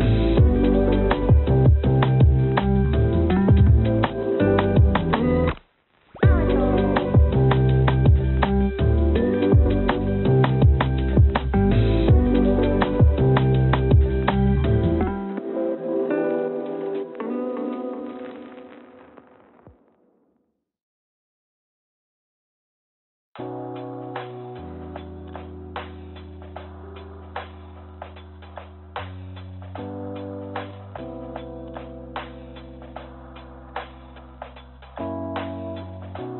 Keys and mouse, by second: 0.6 click, 0.7 click, 3.5 click, 4.8 click, 6.4 g, 14.0 g, 18.9 Tab, 20.7 click, 22.4 3, 25.9 e, 32.5 s.